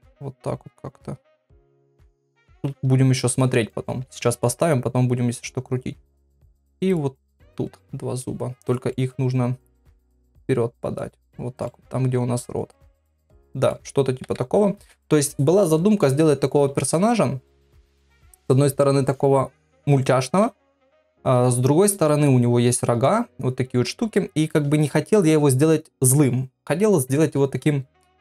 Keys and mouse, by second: 2.7 KP_1, 3.7 shift+middle click, 4.2 shift+d, 6.9 click, 7.3 middle click, 8.9 middle click, 10.2 click, 11.2 click, 11.6 middle click, 13.0 middle click, 14.2 KP_3, 22.0 middle click, 24.1 middle click.